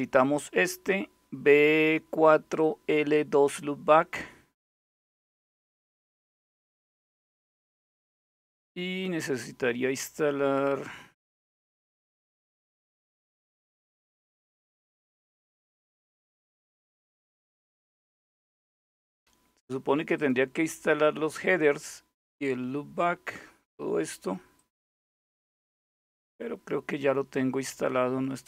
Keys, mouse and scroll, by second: 3.9-4.7 scroll down 2, 8.0-8.8 scroll down 1, 10.1-10.9 scroll up 1, 12.5-13.4 scroll down 2, 19.8 click, 20.3-20.9 scroll up 2, 24.2 click, 25.3-26.1 scroll down 1, 26.1-27.0 scroll up 1, 27.9-28.4 scroll down 1.